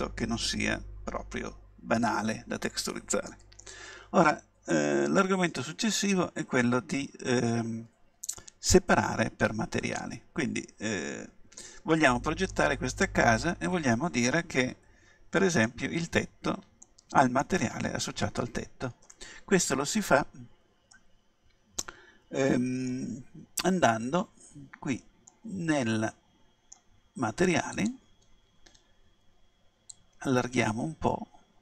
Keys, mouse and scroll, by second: 8.4-10.5 middle drag, 12.5-14.3 middle drag, 16.8-18.8 middle drag, 20.9-22.7 middle drag, 25.3-27.1 middle drag, 27.8-31.6 drag.